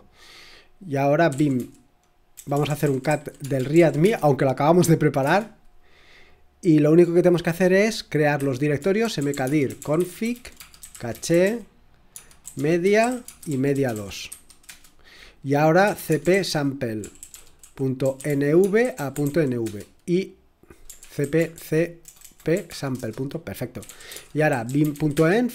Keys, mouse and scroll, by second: 1.1-5.7 typing, 7.7-19.7 typing, 20.7-25.5 typing.